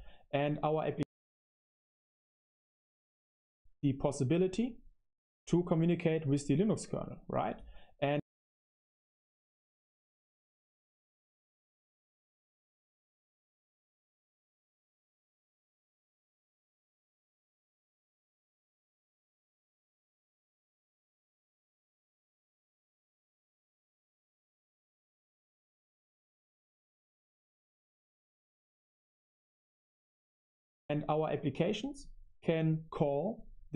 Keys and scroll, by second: 3.3 space, 7.9 space, 8.6 super+3, 9.2-14.5 typing, 16.0-30.5 typing.